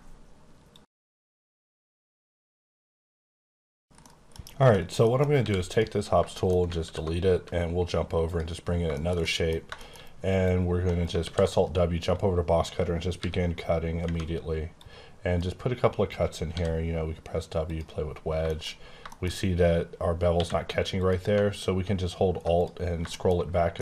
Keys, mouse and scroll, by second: 4.4 scroll down 2, 4.7 shift+middle click, 5.0 double middle click, 5.3 x, 5.7 click, 6.3 shift+middle click, 6.8 alt+w, 8.2 click, 8.9 shift+scroll down 1, 9.0 shift+middle click, 10.4 click, 10.9 right click, 11.2 alt+w, 11.5 alt+click, 13.1 b, 14.7 click, 16.5 w, 17.6 click, 18.1-19.3 scroll up 8, 18.5 shift+middle click, 19.0 shift+middle click, 20.3 q, 21.0 click, 21.6 alt+scroll down 6, 22.5 click, 22.8 scroll down 7, 23.0 scroll up 1, 23.1 middle click, 23.7 middle click.